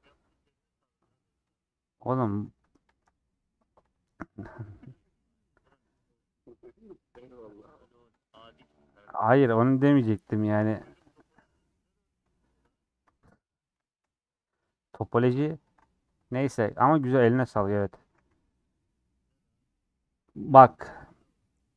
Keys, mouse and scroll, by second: 0.6 scroll up 3, 1.5 click, 1.6-2.9 middle drag, 2.9 ctrl+click, 3.1 middle click, 3.9 ctrl+click, 4.3-6.9 middle drag, 6.9 ctrl+click, 7.3 middle click, 8.2 ctrl+click, 8.7 middle click, 9.6 ctrl+click, 10.1 scroll up 3, 10.3 shift+middle click, 11.1 ctrl+click, 11.6 scroll down 2, 11.8 middle click, 12.7 ctrl+Left, 13.1-16.6 middle drag, 16.6 ctrl+Left, 17.2 middle click, 18.0 a, 18.2 u.